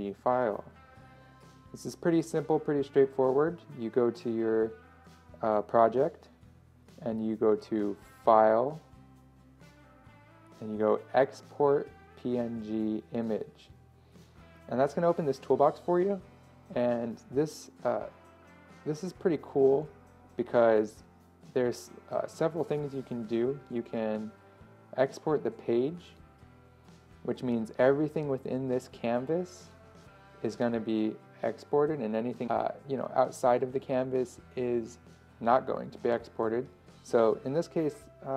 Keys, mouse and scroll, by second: 3.9 click, 4.0-10.2 drag.